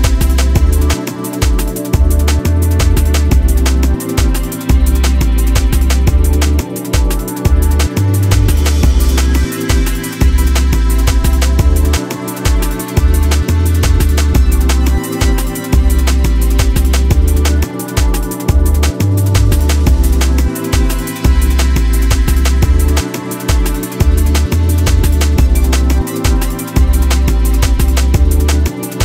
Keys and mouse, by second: 0.7 alt+click, 1.5 click, 3.2 alt+click, 4.8 click, 5.7 click, 7.8 click, 11.8 alt+middle click, 14.2 ctrl+Tab, 15.8 click, 16.3 shift+click, 18.1 click, 18.8-19.8 drag, 21.0 drag, 22.6 click, 23.1 ctrl+Tab, 23.8 click, 24.1 r, 28.3 click.